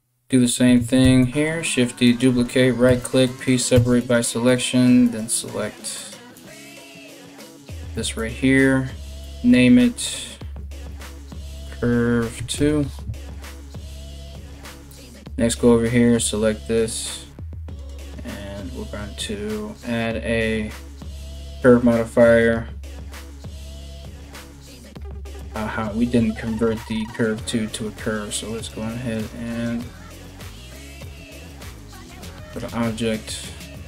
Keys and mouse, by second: 0.6 shift+d, 2.5 p, 3.4 Tab, 3.6 right click, 4.1 right click, 4.7 right click, 5.1 right click, 5.6 right click, 6.0 right click, 6.3 right click, 8.9 middle click, 9.7-18.6 drag, 14.5 middle click, 14.5 right click, 18.6 middle click, 19.4-33.8 drag, 27.6 middle click, 27.6 right click, 28.0 middle click, 28.0 right click, 28.3 middle click, 28.3 right click, 28.7 middle click, 28.7 right click, 29.1 middle click, 29.1 right click, 29.5 middle click, 29.5 right click, 29.8 middle click, 29.8 right click, 30.3 middle click, 30.3 right click, 30.6 middle click, 30.6 right click.